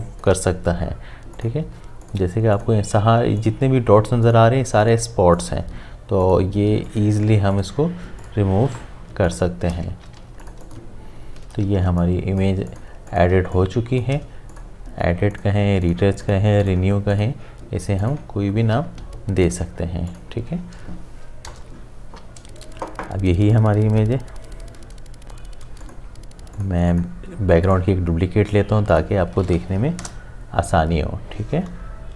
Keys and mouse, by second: 0.2 space, 1.3 click, 8.7 space, 9.3 ctrl+alt+click, 9.9 ctrl+z, 10.2 space, 10.4 ctrl+alt+click, 11.8 space, 12.0 click, 12.3 space, 12.7 ctrl+click, 13.4 ctrl+space, 13.6 click, 13.9 space, 14.5 click, 22.1 v, 25.7 v, 25.8 shift+click, 27.7 right click, 28.9 click, 30.0 Return.